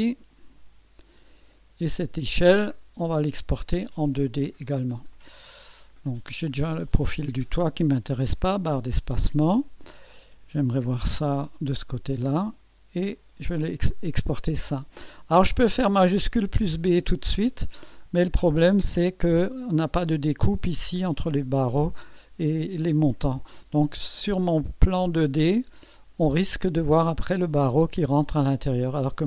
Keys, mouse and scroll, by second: 2.1-2.8 scroll down 3, 3.7-4.8 middle drag, 5.1 right click, 5.9 scroll up 2, 6.9 click, 8.7 space, 9.2-9.5 scroll down 2, 10.8 1, 11.6 scroll up 2, 12.3 right click, 17.4 scroll up 1, 18.1 scroll up 1, 24.3-24.7 scroll up 1, 25.3 scroll down 1, 25.5 middle click, 26.3 right click.